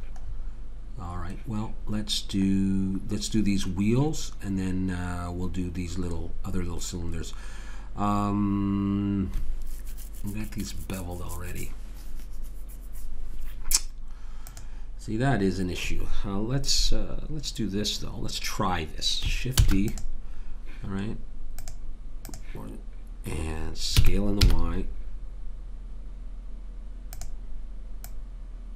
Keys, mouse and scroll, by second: 19.6 shift+d, 24.0 s, 28.1 click.